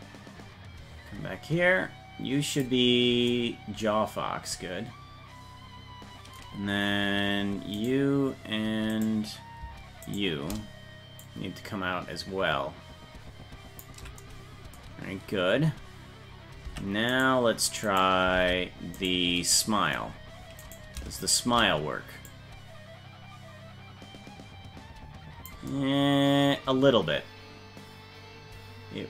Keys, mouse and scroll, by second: 7.8 right click, 9.1 right click, 10.1 shift+right click, 11.3-13.9 drag, 16.7 Tab, 17.2 right click, 18.1 right click, 18.4 ctrl+Tab, 19.1 right click, 20.7 right click, 21.3 shift+right click, 22.3-25.5 drag.